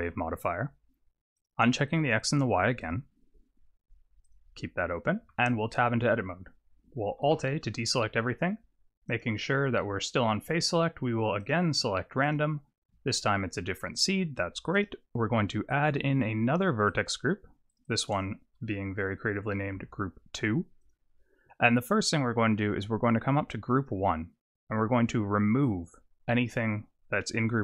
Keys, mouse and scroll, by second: 1.4 click, 1.9 click, 2.8 click, 4.2 click, 5.3 Tab, 7.3 alt+a, 9.1 click, 11.4 click, 14.7 click, 16.9 click, 17.7 click, 17.8 click, 23.8 click, 25.6 click.